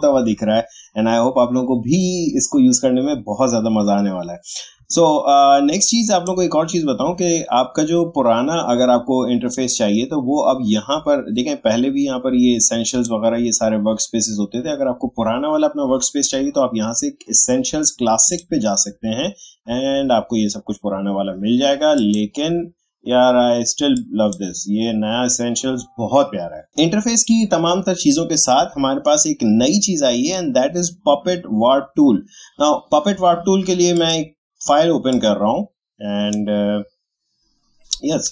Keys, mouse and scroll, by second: 5.8-12.8 drag, 12.9 click, 18.2 click, 21.9-26.7 drag, 33.9-38.3 drag.